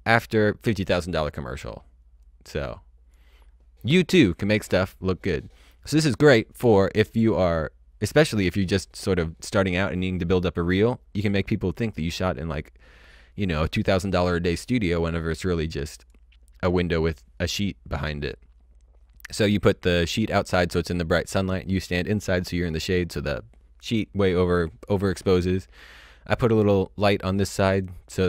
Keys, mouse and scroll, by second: 2.1 click, 15.9 click.